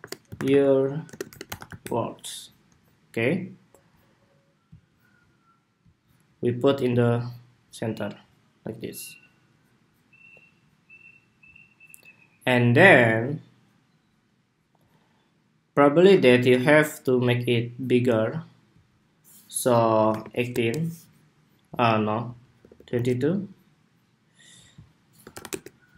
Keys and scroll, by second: 2.4 Escape.